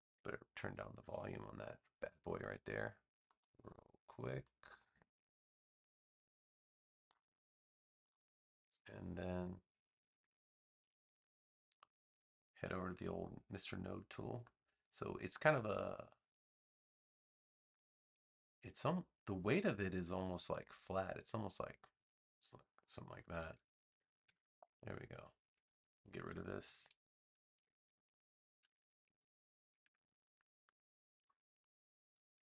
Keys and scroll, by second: 11.9 a, 24.2 v, 26.2 BackSpace, 27.5 v.